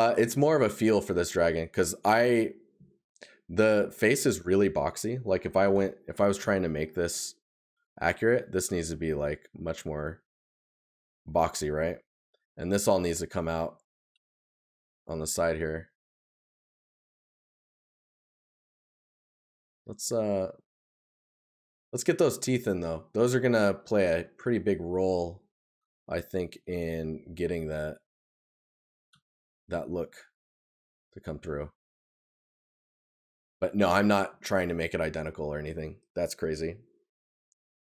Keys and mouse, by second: 0.2 right click, 11.8 right click, 18.9 right click, 21.6 right click, 24.6 right click, 32.9 right click.